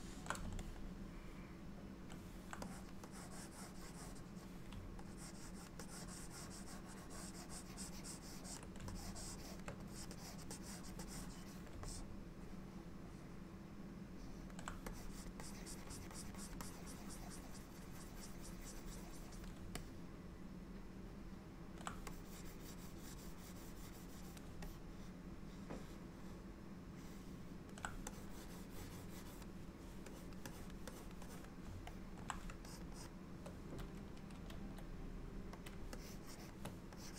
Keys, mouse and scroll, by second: 0.7 middle click, 2.7 click, 3.2 click, 3.9 click, 5.2 ctrl+click, 5.5 ctrl+click, 5.9 click, 6.2 ctrl+click, 9.0 shift+click, 10.0 click, 10.2 click, 10.6 click, 11.1 click, 11.8 shift+click, 11.9 middle click, 15.0 click, 15.5 click, 16.0 click, 16.2 click, 16.4 click, 16.7 click, 19.9 middle click, 22.2 click, 24.7 middle click, 28.2 click, 30.2 click, 30.6 click, 31.0 click, 31.3 click, 32.0 middle click, 32.8-33.4 shift+click, 33.1 shift+click, 34.5 f, 36.0 shift+click, 36.4 shift+click, 37.1 click.